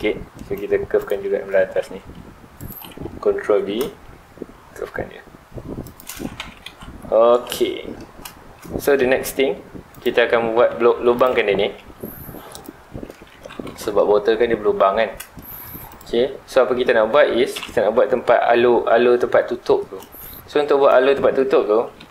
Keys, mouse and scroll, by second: 0.0 Tab, 0.3-0.6 middle drag, 0.6 scroll up 1, 1.0 click, 1.3 shift+middle drag, 1.6 Tab, 1.9 2, 2.5 alt+click, 3.5 ctrl+b, 6.0 shift+click, 6.1 alt+a, 6.4 Tab, 6.6 alt+a, 6.8 scroll down 1, 7.0-7.5 middle drag, 7.5 ctrl+s, 7.7-9.9 middle drag, 9.9 click, 10.7 Tab, 10.9 3, 11.1 click, 11.7 x, 13.1 middle click, 13.3 Tab, 13.6 alt+a, 13.8 middle click, 14.3-14.8 scroll down 2, 14.8-15.3 scroll up 2, 15.3 shift+middle drag, 15.5-15.9 scroll up 2, 15.9 click, 16.2 Tab, 16.5-17.5 middle drag, 17.5 KP_1, 20.0-20.4 scroll up 2, 20.4 shift+middle click, 20.9-22.1 scroll up 2.